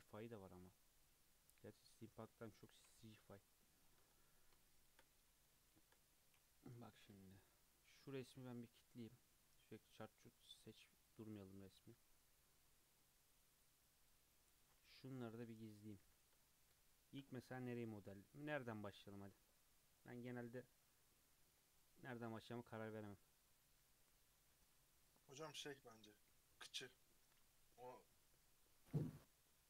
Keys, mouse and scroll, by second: 0.2-3.3 middle drag, 3.4 KP_3, 3.8 scroll down 2, 4.1-4.6 scroll up 5, 4.6-6.6 shift+middle drag, 6.6 KP_3, 6.7-7.3 scroll down 4, 7.3 click, 9.4 click, 9.7-11.1 drag, 11.3 click, 11.5 drag, 13.2 click, 13.5 click, 13.9 click, 14.3 click, 16.0 h, 16.4-16.9 scroll up 4, 16.9-20.1 shift+middle drag.